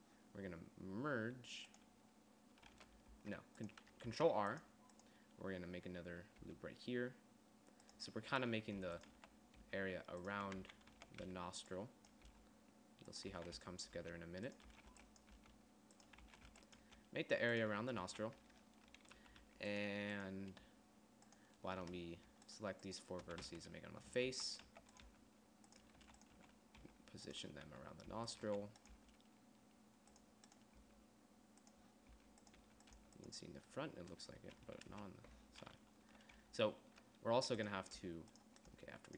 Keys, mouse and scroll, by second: 3.6 ctrl+r, 4.6 ctrl+r, 7.0 g, 9.3-11.8 typing, 13.6-17.4 typing, 16.5 click, 18.5 a, 19.7 z, 20.0 z, 24.0-29.5 typing, 31.3 g, 32.7 g, 33.2 z, 33.5 g, 35.4 KP_1, 36.3 z, 36.6 z, 38.5 g.